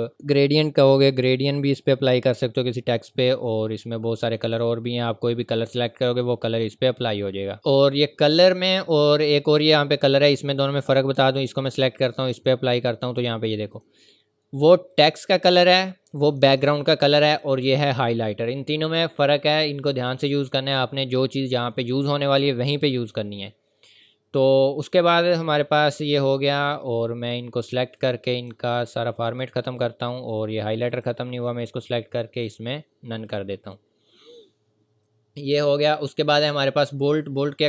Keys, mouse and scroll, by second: 4.2 click, 10.3 click, 20.4 click, 28.0 click.